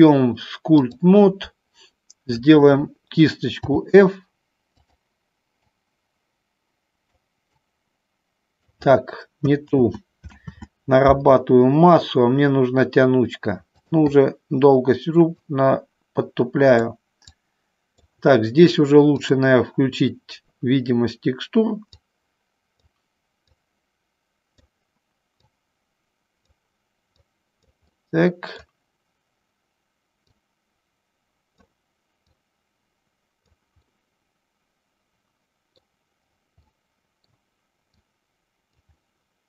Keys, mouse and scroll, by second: 3.6 f, 5.8-7.3 drag, 7.6-8.9 drag, 9.8 ctrl+z, 10.5 ctrl+z, 14.0 click, 15.5-16.9 drag, 17.4 click, 19.9 click, 23.5-24.9 drag, 25.6-26.8 drag, 27.4 click, 28.0 middle click, 30.5-31.9 drag, 32.5-33.8 drag, 34.0-35.9 middle drag, 36.9 middle click, 38.0 click, 39.1-39.4 middle drag.